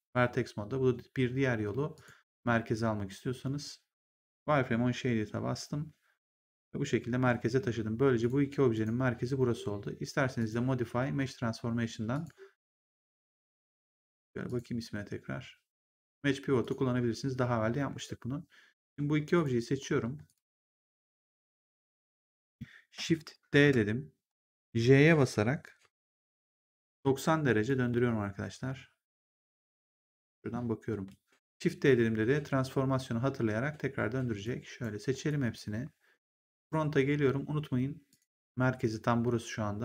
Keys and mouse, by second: 1.8 click, 6.0 middle click, 8.1 click, 10.3 click, 12.0 click, 14.4 click, 16.5 click, 18.8 shift+click, 20.2 shift+click, 21.6 click, 23.4 shift+d, 26.6 e, 26.9 j, 27.6 click, 34.4 click, 35.2 click, 36.5 right click, 38.0 click.